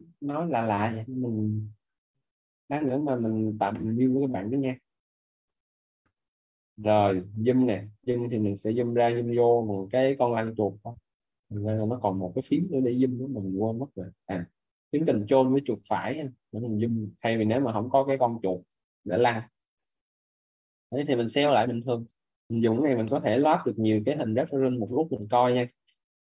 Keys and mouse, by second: 18.5 ctrl+right click, 25.9 middle click.